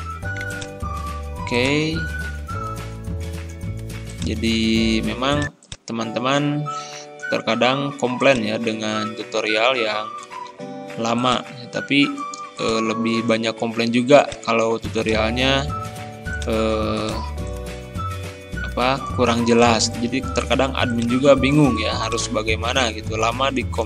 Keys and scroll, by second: 10.5 ctrl+g.